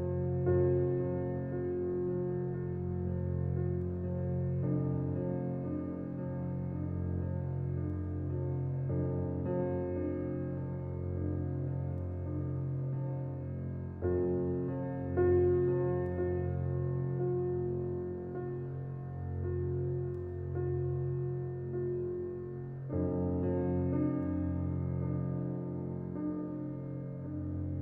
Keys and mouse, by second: 0.9 ctrl+r, 4.0 click, 5.2 Tab, 6.3 shift+a, 10.0 Tab, 10.0 s, 11.8 s, 14.0 e, 18.5 e, 20.4 s, 21.4 e, 22.9 s.